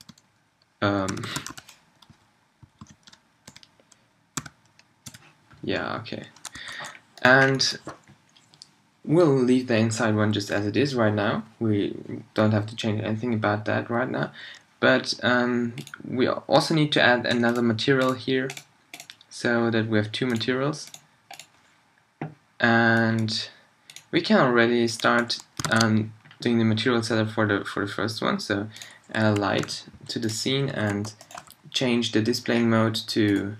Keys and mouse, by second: 5.0-6.5 middle drag, 6.5 a, 7.1-17.5 middle drag, 28.8 shift+a, 29.4 g, 31.2 b, 31.4 n.